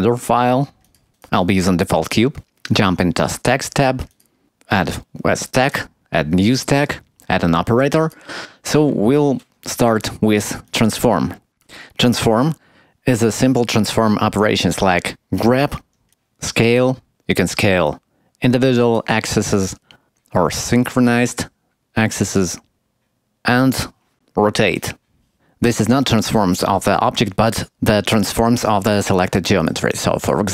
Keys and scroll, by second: 25.3 Tab, 25.6 Tab.